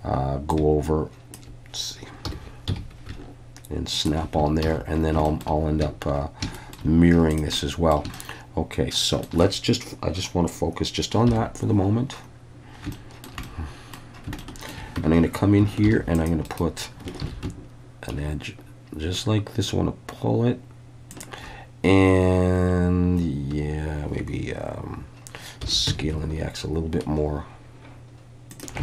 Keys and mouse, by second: 2.3 g, 2.7 x, 4.0 ctrl+click, 4.7 alt+a, 5.3 shift+middle click, 6.6 shift+middle click, 7.6 middle click, 8.1-9.3 shift+middle drag, 11.3 /, 12.9-13.3 shift+middle drag, 13.4-14.0 middle drag, 14.4-14.7 shift+middle drag, 15.0 Tab, 15.8 ctrl+r, 16.5 click, 17.2 ctrl+b, 21.1 shift+click, 25.6 s, 25.9 x, 28.5 shift+click.